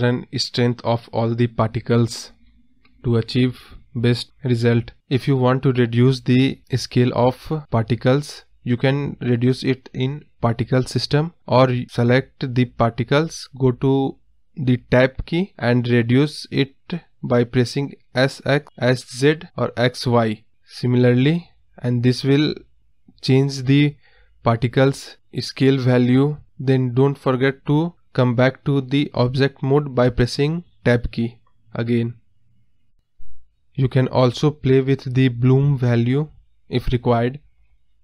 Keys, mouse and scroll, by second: 3.9 scroll down 1, 4.0-4.7 scroll up 1, 4.7 scroll down 3, 4.9-5.3 scroll up 1, 5.7 click, 6.0 scroll down 3, 6.2 middle click, 6.4 scroll up 2, 6.5-7.1 scroll down 1, 7.1 click, 9.4 Tab, 10.0 scroll up 1, 10.1-10.9 scroll down 1, 10.9 middle click, 11.4-12.4 scroll down 1, 12.4 s, 16.1 s, 17.3 scroll up 3, 17.6 middle click, 17.7-18.2 scroll down 4, 18.2-18.7 scroll up 3, 18.7-19.1 scroll down 2, 19.1 Tab, 19.7-21.0 middle drag, 21.0 scroll up 4, 21.2 scroll down 2, 21.4-22.6 middle drag, 22.7 scroll down 2, 22.9-23.5 scroll up 3, 23.2 Tab, 23.5 scroll down 2, 23.8-24.5 scroll up 2, 24.5 s, 28.7 Tab, 28.9 scroll down 2, 29.0 middle drag, 29.2 scroll up 4, 29.5-30.2 middle drag, 30.2 scroll down 2, 30.3-30.8 middle drag, 30.8-31.8 scroll down 1, 31.8-32.5 scroll down 1, 32.5 click, 33.0 KP_0, 33.3-33.8 scroll up 6, 33.8-34.5 scroll down 2, 36.2-38.0 drag.